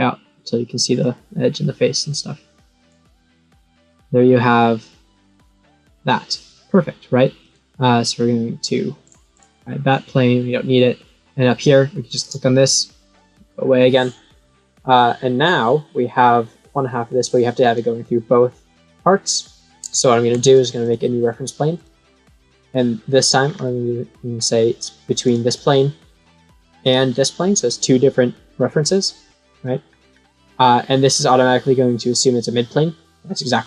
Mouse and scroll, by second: 2.8 click, 7.4-8.9 right drag, 9.0 click, 9.2 click, 10.0 middle click, 12.0 click, 14.1-15.9 middle drag, 19.1 middle click, 20.7 click, 21.7 click, 23.4 scroll down 4, 25.2 click, 26.8 click, 29.8 scroll up 2, 32.8-33.6 middle drag.